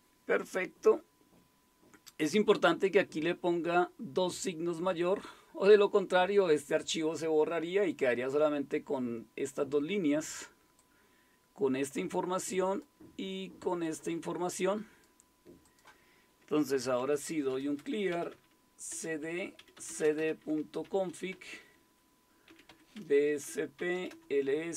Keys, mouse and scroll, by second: 4.7 click, 10.8-12.9 drag, 16.7-24.6 typing.